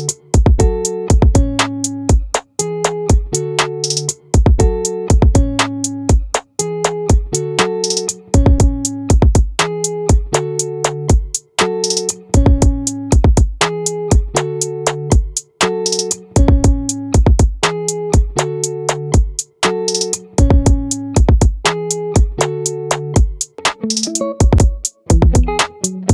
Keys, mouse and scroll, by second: 2.4-4.3 middle drag, 8.0-11.1 middle drag, 17.9 click, 21.3-23.0 drag.